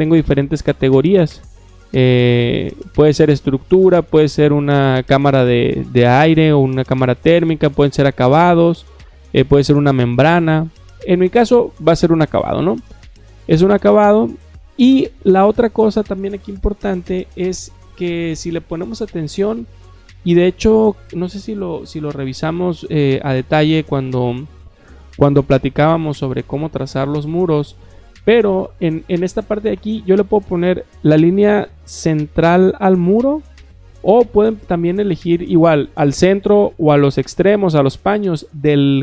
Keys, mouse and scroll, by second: 12.4 click.